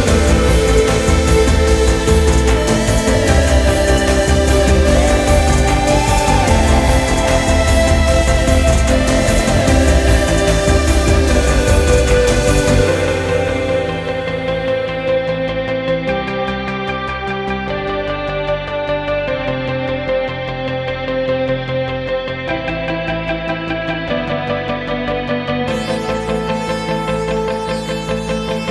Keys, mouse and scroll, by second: 2.0-5.0 middle drag, 5.8-8.1 drag, 8.1 BackSpace, 8.4 BackSpace, 12.4-17.0 ctrl+middle drag, 17.0-18.2 drag, 18.2 BackSpace, 18.5 BackSpace, 18.6 BackSpace, 27.2-28.7 drag.